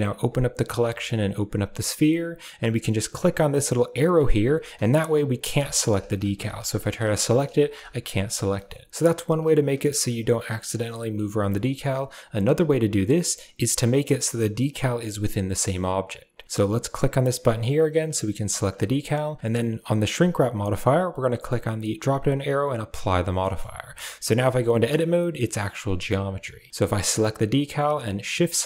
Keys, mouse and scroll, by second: 4.0 click, 4.7 right drag, 6.5 right click, 6.8 right drag, 7.3 a, 7.5 right click, 7.8 right click, 8.1 right click, 9.2 right click, 9.5 right drag, 10.1-10.7 right drag, 10.7 middle drag, 11.4 shift+middle click, 17.3 click, 17.8 right click, 20.8-22.8 drag, 23.3 middle drag, 23.6 Tab, 24.3 middle click, 25.5 Tab, 25.9 middle drag, 28.3 shift+right click.